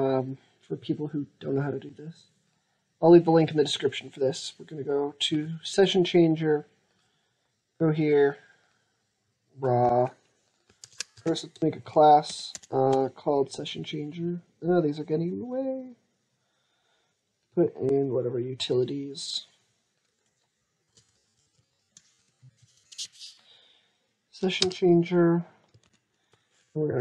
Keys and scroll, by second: 10.6 ctrl+c, 11.1 alt+Tab, 11.6 alt+Tab, 12.1 alt+Tab, 12.3 alt+Tab, 25.7 alt+Tab, 26.8 ctrl+a.